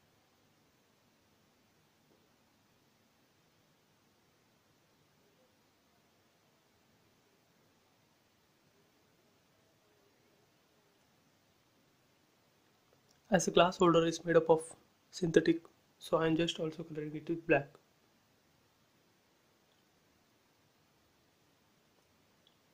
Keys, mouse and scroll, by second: 0.0 scroll down 1, 1.0-1.7 scroll down 1, 1.9-4.9 shift+middle drag, 6.0 click, 7.3 scroll up 1, 9.6 shift+middle click, 11.0 scroll down 1, 12.5 scroll up 1, 14.1 click, 17.7 b, 17.9 click, 18.4 space, 18.5 scroll down 1, 19.7 scroll, 19.7 scroll up 1, 20.4 click, 21.6 b, 21.8 click, 22.3 space, 22.5 click.